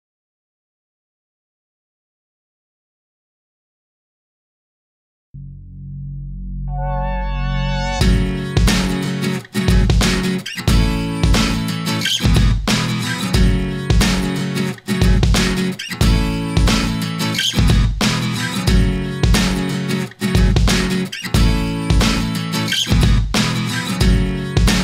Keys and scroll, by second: 13.1 Return.